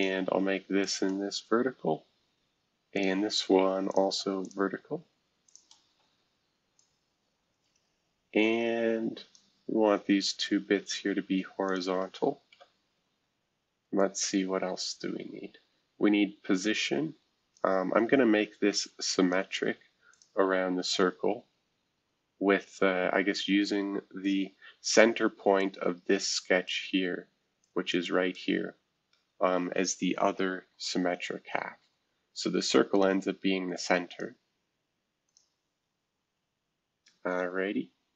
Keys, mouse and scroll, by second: 0.8 click, 1.5-2.2 typing, 2.9-12.5 shift+drag, 5.8 typing, 12.5 typing, 13.9-19.0 drag, 19.1-22.2 drag, 23.2 Escape, 24.7 F2, 25.5-29.8 drag, 30.5 shift+F2, 31.8 s, 32.9 click, 34.1 click, 35.3 click, 36.3 Escape, 37.2-38.1 scroll down 1.